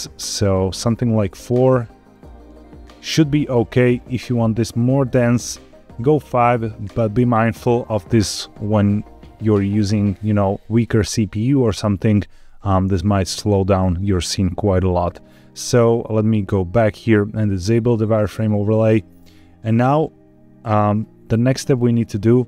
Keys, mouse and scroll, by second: 0.2 click, 0.5 click, 2.0 click, 5.2 click, 6.7 click, 18.4 click, 19.3-20.6 middle drag, 21.0-21.3 scroll up 1, 21.3 middle click.